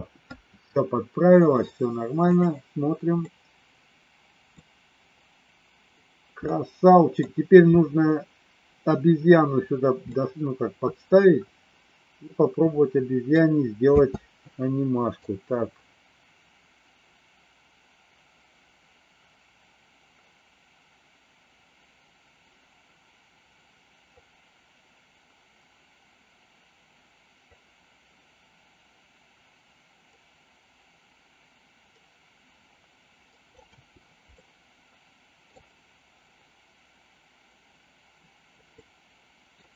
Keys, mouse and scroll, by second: 2.2 click, 3.2-4.5 middle drag, 6.3 middle click, 10.1-13.2 middle drag, 13.8 space, 15.2-33.6 drag, 33.6 space, 34.3-35.5 middle drag, 38.7 middle click.